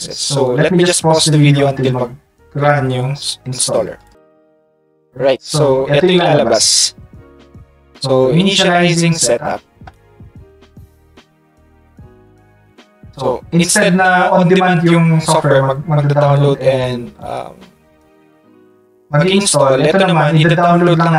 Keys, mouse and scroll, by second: 4.0 click.